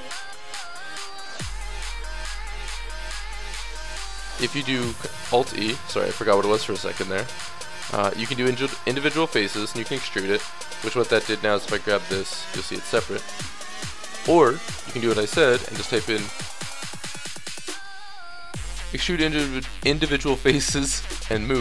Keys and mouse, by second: 0.3 shift+w, 1.4 ctrl+z, 2.5 shift+e, 3.4 alt+e, 11.1 click, 11.9 g, 13.8-15.9 middle drag, 14.8 space.